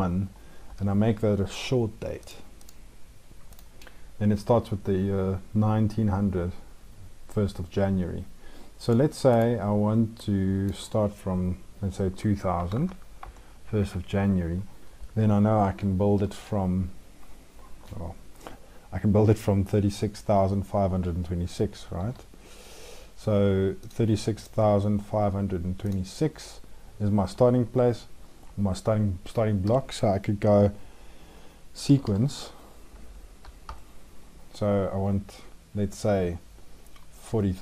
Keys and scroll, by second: 15.9 ctrl+`, 21.8 ctrl+`.